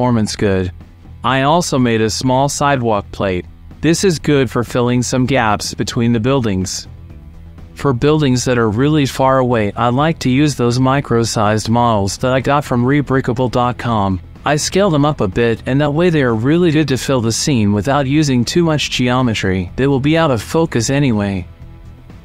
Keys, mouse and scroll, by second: 0.3 middle click, 0.4 shift+middle click, 0.7 alt+click, 0.7 alt+middle click, 0.7 alt+right click, 0.7 alt+shift+g, 1.0 ctrl+s, 1.1 middle click, 1.2 shift+click, 1.4 r, 1.4 z, 1.4 KP_9, 1.4 KP_0, 1.6 click, 2.0 alt+g, 2.0 shift+click, 2.1 shift+middle click, 2.4 right click, 2.7 right click, 3.3 shift+middle click, 3.5 g, 4.2 middle click, 4.5 click, 5.5 middle click, 5.7 shift+middle click, 6.0 alt+d, 6.5 shift+middle click, 6.7 shift+middle click, 7.1 alt+g, 7.1 shift+middle click, 7.3-8.7 typing, 7.7 click, 8.0 shift+middle click, 8.0 shift+click, 8.5 alt+g, 8.7 KP_Enter, 8.8 click, 9.1 middle click, 9.2 click, 10.0 middle click, 10.0 click, 10.4 middle click, 10.5 click, 10.5 right click, 10.6 middle click, 10.8 alt+d, 10.9 r, 10.9 z, 10.9 KP_9, 10.9 KP_0, 11.1 KP_Enter, 11.2 click, 11.4 shift+click, 11.5 click, 11.6 shift+click, 11.7 alt+d, 12.4 click, 12.7 alt+d, 13.0 click, 14.1 click, 14.7 n, 14.8 n, 15.0 click, 15.1 s, 15.1 KP_3, 15.8 right click, 16.1 shift+middle click, 16.4 shift+middle click, 16.7 alt+g, 17.1 s, 17.1 KP_3, 18.1 shift+click, 18.7 click, 19.4 click, 22.0 click.